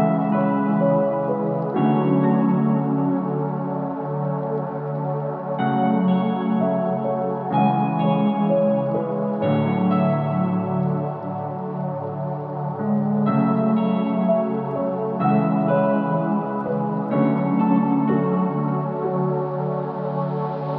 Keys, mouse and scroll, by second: 1.5 middle click, 1.7 Tab, 1.9-2.3 scroll down 3, 2.3 click, 2.5 middle click, 2.9 shift+middle click, 3.1-4.3 scroll up 4, 3.3 click, 3.6 middle click, 4.3 Tab, 4.8 s, 7.0 Tab, 7.1-7.8 scroll down 5, 7.3 click, 7.8 right click, 8.3 click, 8.6 right click, 9.3 click, 10.0-10.7 scroll up 3, 11.1-12.1 scroll down 2.